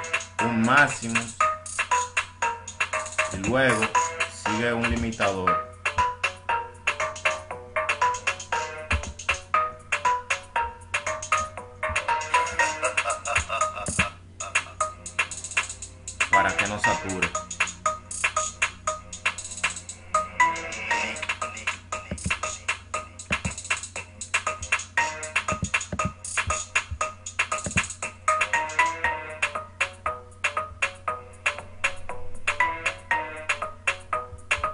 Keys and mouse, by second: 23.2-24.4 drag.